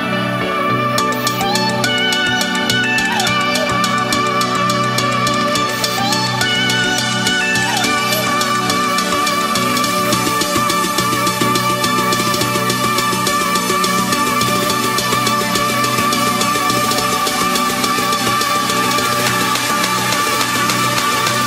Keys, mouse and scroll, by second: 0.0 click, 3.0 right click, 3.4 Tab, 4.1 click, 6.0-6.8 typing, 7.4 click, 11.9-13.0 typing, 13.8-15.7 drag, 16.5 right click, 16.6 Tab, 16.6 F10, 17.5-21.4 drag.